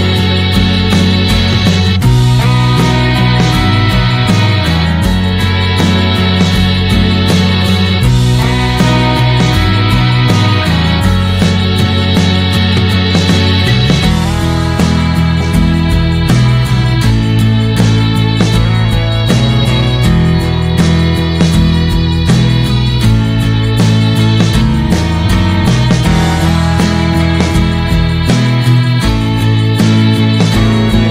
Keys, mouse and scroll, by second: 3.7 middle click, 4.0-27.5 drag, 27.7-29.0 scroll down 1, 29.0-30.5 scroll down 1, 30.5-31.1 scroll down 1.